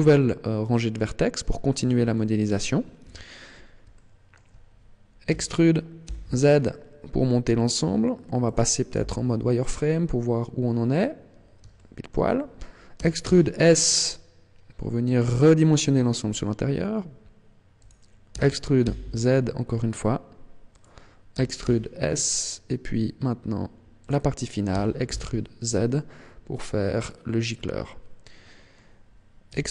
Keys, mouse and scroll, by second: 1.9 click, 2.1 middle click, 3.0 KP_1, 3.9 shift+middle click, 5.3 e, 8.7 click, 8.9 z, 9.7-10.1 scroll up 4, 10.6 scroll down 3, 11.7 shift+middle click, 12.9 e, 17.8 click, 18.3 e, 20.9 click, 21.3 e, 24.1 click, 24.7 e, 27.1 click, 28.2 middle click, 29.5 e.